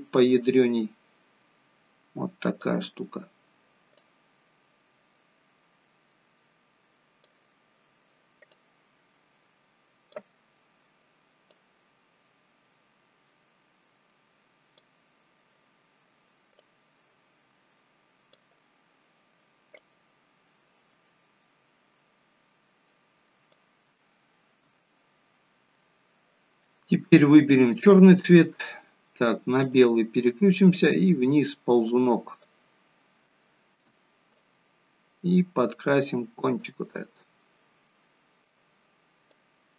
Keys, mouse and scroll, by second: 2.9 middle click, 4.1 click, 7.6 middle click, 8.6 click, 11.5 click, 15.4 middle click, 16.7 click, 18.9 middle click, 21.9 click, 24.0 shift+middle click, 27.4 click, 33.2 shift+middle click, 34.4 click, 37.2 middle click, 39.3 click.